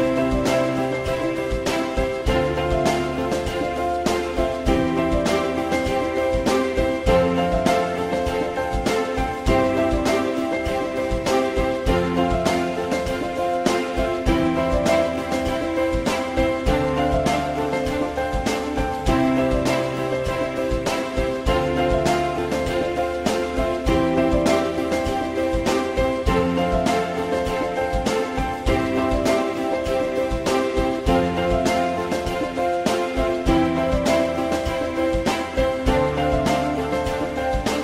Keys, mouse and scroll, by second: 1.8 alt+middle click, 4.8 alt+middle click, 7.2 F4, 10.9 alt+middle click, 13.7 ctrl+click, 15.0-16.2 drag, 16.8 alt+x, 20.0 alt+x, 23.5 alt+x, 36.4 click.